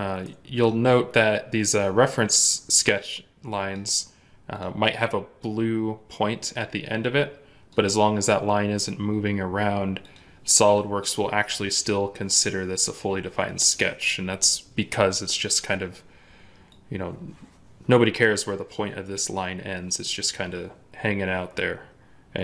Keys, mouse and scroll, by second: 0.5 ctrl+click.